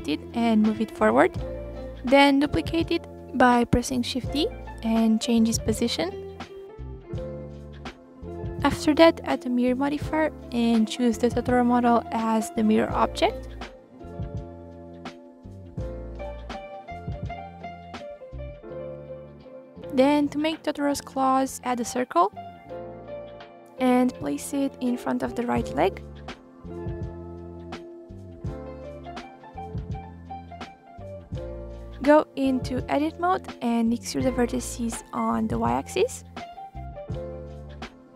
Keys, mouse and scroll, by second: 0.2-0.9 scroll up 1, 0.9-3.2 typing, 1.6 click, 2.5 click, 4.2 click, 5.0 ctrl+z, 5.1 click, 7.0 click, 7.6 click, 8.8-10.4 drag, 11.0 click, 11.3 scroll down 2, 11.6-12.9 middle drag, 12.9 click, 13.2 middle click, 13.8 click, 14.7-15.1 scroll up 1, 15.1 r, 16.0-16.8 middle drag, 16.8 click, 17.6-18.5 middle drag, 18.5 click, 19.1 click, 19.8 shift+a, 22.4-23.2 scroll down 2, 23.2 click, 23.7 click, 24.5 r, 25.8 s, 26.7 g, 27.4-27.9 middle drag, 27.9 click, 28.6 KP_1, 28.9-29.6 scroll up 6, 29.6 click, 30.1 s, 32.7 click, 33.4-34.7 drag, 34.7-35.7 middle drag, 35.7 e, 37.3 s.